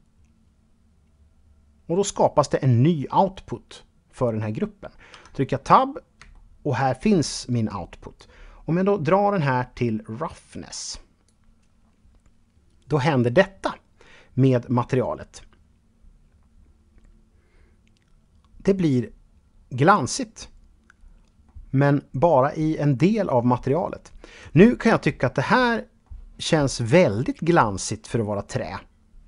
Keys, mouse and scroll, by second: 4.3 Tab, 5.5-7.3 shift+middle drag, 7.3-10.5 drag, 18.4-19.1 scroll up 1, 20.1-20.6 scroll down 1, 20.6-28.6 middle drag.